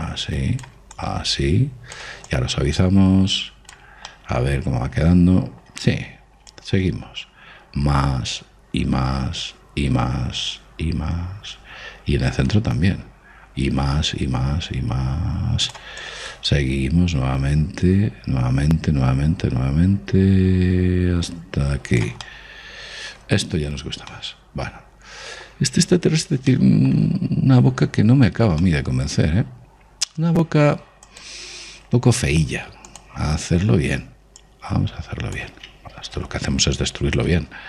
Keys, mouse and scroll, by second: 1.7-4.8 drag, 4.8-6.5 middle drag, 7.2 click, 16.7 click, 23.0-31.8 middle drag, 31.8 click, 35.2 click, 36.9 ctrl+z.